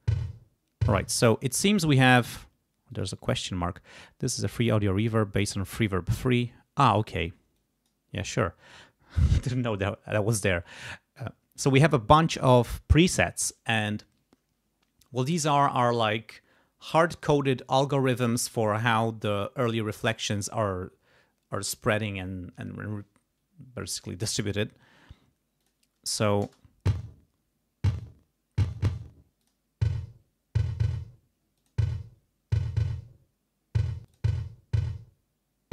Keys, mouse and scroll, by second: 1.0 space, 2.9 click, 7.6 click, 25.6 click, 26.4 space, 29.4 click, 31.6 click, 34.1 click.